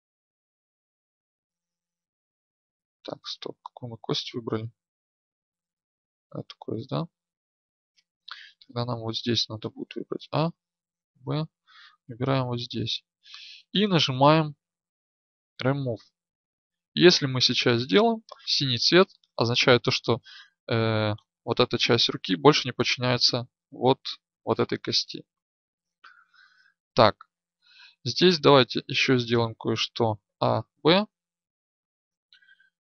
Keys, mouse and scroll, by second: 2.9 Tab, 7.1 Tab, 9.7 a, 17.1 Tab, 28.5 Tab, 30.2 a.